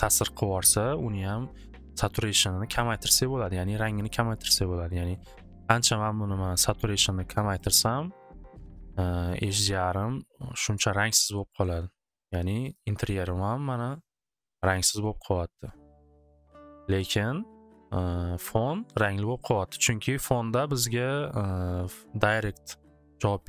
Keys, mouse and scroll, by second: 3.6-7.3 drag, 8.2 click, 8.3 click, 9.9 click, 12.7 click, 15.4 click, 16.0-17.9 drag, 22.4 click, 23.3-23.4 drag.